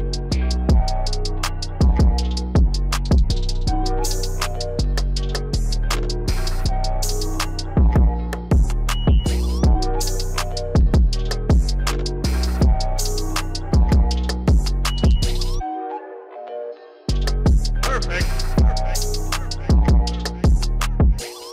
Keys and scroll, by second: 4.4 alt+x.